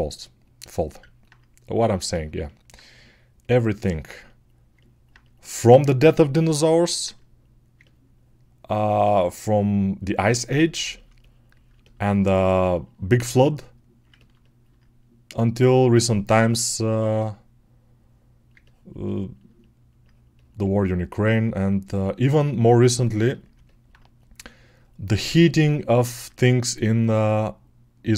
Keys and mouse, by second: 2.6-3.8 right drag, 3.8-14.1 alt+drag, 14.5-28.1 alt+drag.